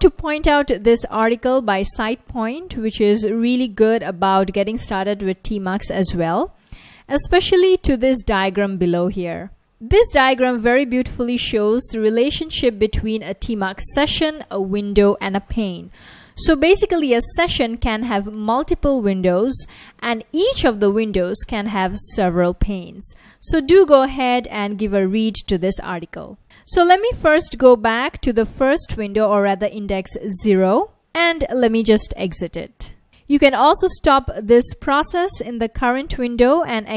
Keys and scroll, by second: 11.1 F1, 17.3 F1, 20.3 F1, 29.8 ctrl+b, 30.4-32.3 typing, 34.2 ctrl+c, 36.4-36.9 typing.